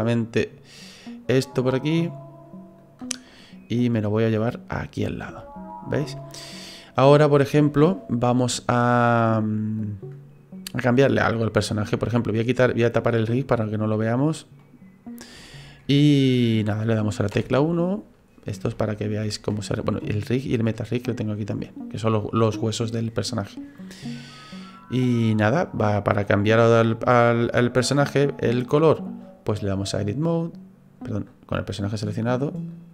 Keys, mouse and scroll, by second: 2.8 click, 3.2 scroll down 2, 4.0 click, 5.4 shift+middle click, 6.2 middle click, 9.0 right click, 9.8 click, 12.7 click, 13.8 middle click, 14.6 middle click, 15.1-15.4 scroll up 3, 15.4 shift+middle click, 17.3 KP_1, 18.0-18.6 scroll up 2, 18.7 shift+middle click, 20.8 click, 25.0 click, 26.8 click, 27.9 click, 31.5 right click, 32.7 click.